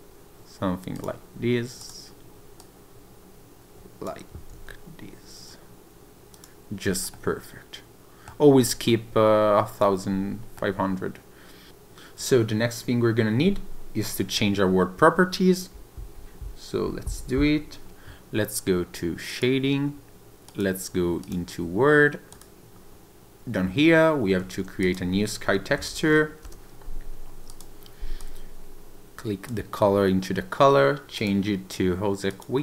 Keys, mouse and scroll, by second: 0.9 click, 1.8 click, 2.6 click, 4.5 r, 6.3 click, 7.1 middle click, 10.5 middle click, 11.7 click.